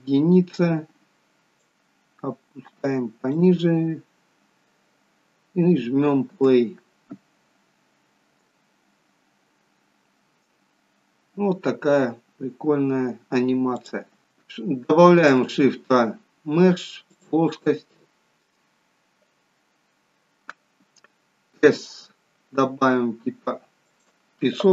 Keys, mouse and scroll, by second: 1.7 click, 4.4-5.3 scroll up 6, 6.3 space, 13.9 click, 14.3 scroll down 2, 15.1 shift+a, 22.3 s.